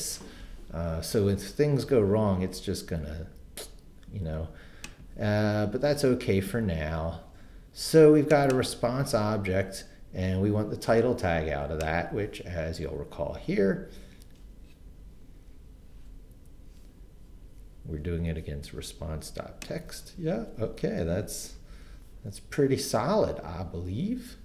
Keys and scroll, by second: 21.6 super+c.